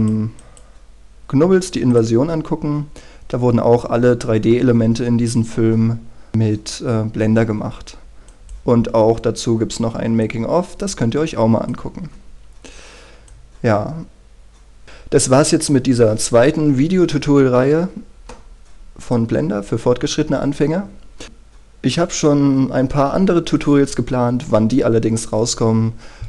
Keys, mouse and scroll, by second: 14.8-18.7 scroll down 1, 19.2-20.3 drag.